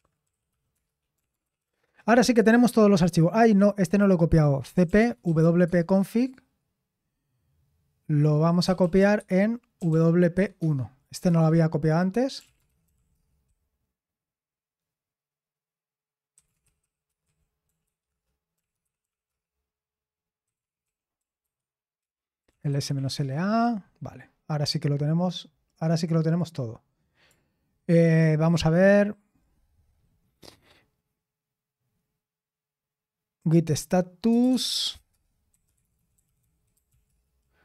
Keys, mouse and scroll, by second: 0.0-2.1 typing, 4.5-5.9 typing, 9.2-10.8 typing, 11.3 Return, 12.1-13.6 typing, 16.1-23.9 typing, 26.3 click, 29.3 click, 34.0-37.6 typing.